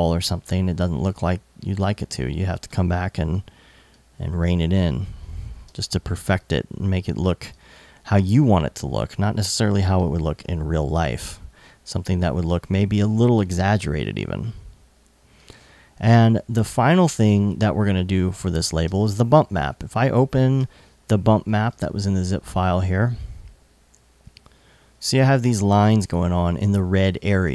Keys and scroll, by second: 5.2 super+s, 5.8 alt+super+s, 18.4 alt+super+s, 18.7 super+Tab.